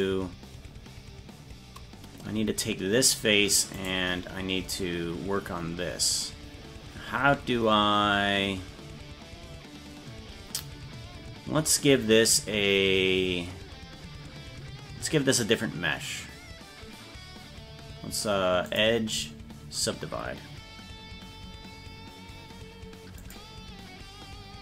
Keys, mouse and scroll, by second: 0.0 right click, 3.1 click, 3.9 right click, 6.6 scroll up 2, 18.7-23.4 drag.